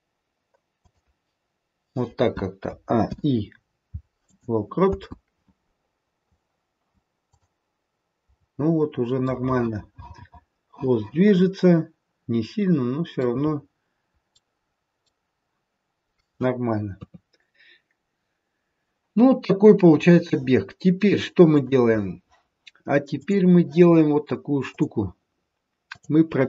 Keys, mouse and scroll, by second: 2.7 a, 3.1 i, 4.8 space, 7.2 click, 8.8-9.9 scroll down 3, 9.3 middle click, 12.2 middle click, 13.4-15.0 scroll up 1, 15.0-16.2 scroll up 2, 16.9 KP_3, 19.4-20.0 scroll down 1, 21.6 click, 23.2 click, 24.5 click, 25.9 click.